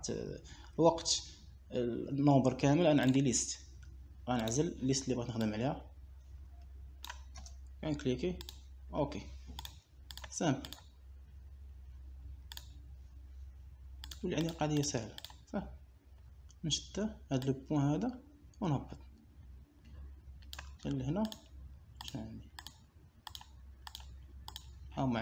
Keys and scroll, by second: 8.8 Return.